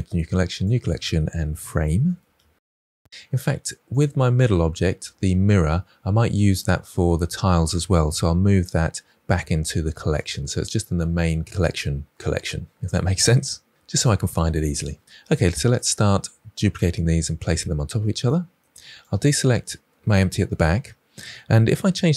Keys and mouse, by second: 3.8 click, 8.6 m, 17.0 KP_1, 18.2-18.6 shift+middle drag.